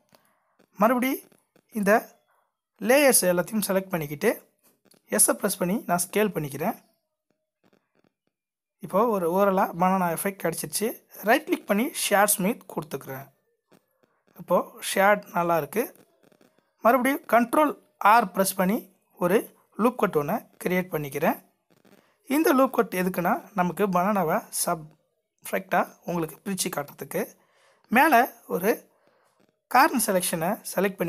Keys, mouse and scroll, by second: 3.6 alt+click, 5.0 s, 6.8 middle click, 11.4 right click, 12.5-12.9 scroll up 2, 13.8 Tab, 16.1 ctrl+r, 20.9 middle click, 22.8 scroll up 1.